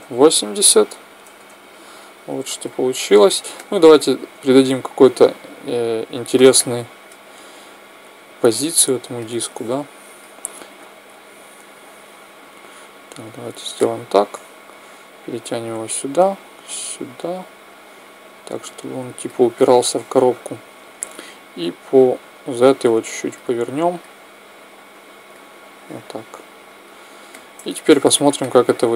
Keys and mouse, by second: 2.1 middle click, 4.5-6.5 drag, 4.5 middle click, 6.3 middle click, 8.8 click, 10.5 KP_1, 11.5-13.3 drag, 14.6-17.8 drag, 14.6 middle click, 15.3 right click, 19.3 middle click, 21.8-23.6 drag, 23.5 middle click, 24.3-26.2 drag, 26.2-28.6 middle drag.